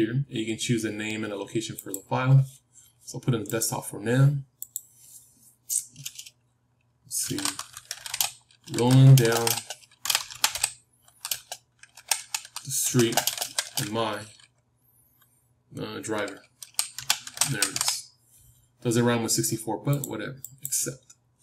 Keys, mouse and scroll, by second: 1.9-3.9 drag.